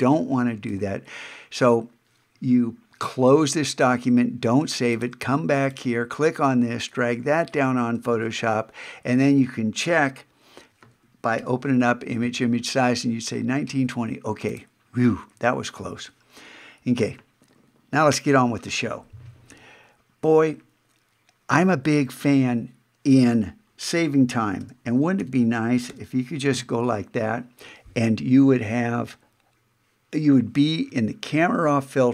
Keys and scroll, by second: 0.7 super+Tab, 8.1 super+Tab, 11.4 alt+super+i, 24.6 alt+shift+super+n, 25.2 alt+shift+super+e, 25.9 alt+shift+super+o, 26.5 alt+shift+super+a.